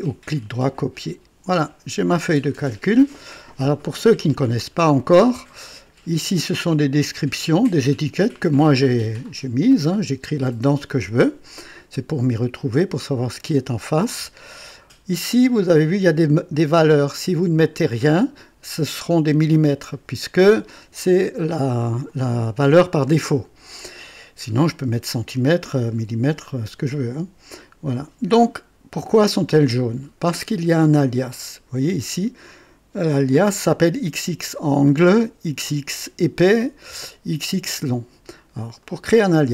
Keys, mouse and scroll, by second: 1.0 click, 31.3 click, 35.1 click, 37.0 click, 38.8 click.